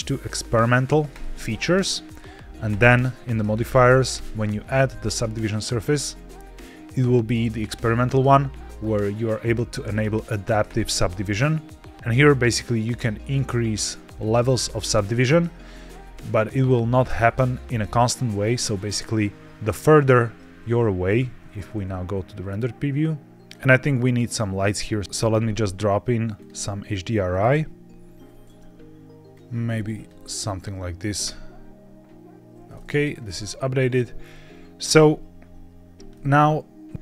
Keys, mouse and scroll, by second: 2.6 click, 3.5 click, 4.0-6.2 drag, 10.6 click, 13.1 click, 13.9 click, 14.7 click, 17.6 scroll down 1, 18.2 scroll down 1, 18.6 middle click, 19.0 scroll down 2, 19.5-19.8 shift+middle drag, 21.1 z, 23.4 click, 24.1 click, 24.9 click, 26.3 click, 27.2 click, 29.2 click, 32.7 middle click, 33.0-33.5 scroll down 3, 33.7 middle click, 34.1 scroll up 3, 36.0 middle click, 36.9 click, 36.9-37.0 scroll down 1.